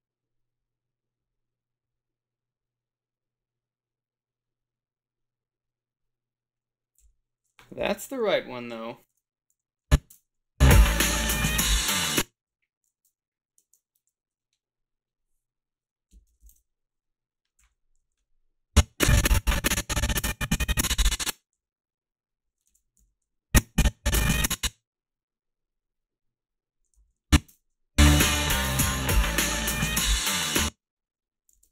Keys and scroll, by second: 7.1 f, 9.5 ctrl+r, 9.5 a, 10.1 space, 11.9 space, 12.5 =, 12.5 space, 15.9-18.0 typing, 21.5 s, 23.0 ctrl+z, 23.0 a, 27.0 a, 27.5 space, 30.6 space, 31.6 alt+shift+s.